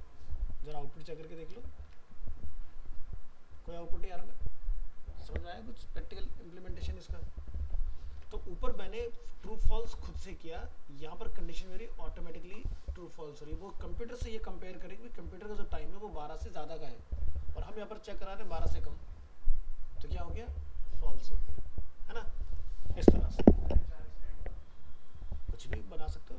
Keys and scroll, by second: 1.2 ctrl+s, 1.9 alt+Tab, 8.1 alt+Tab.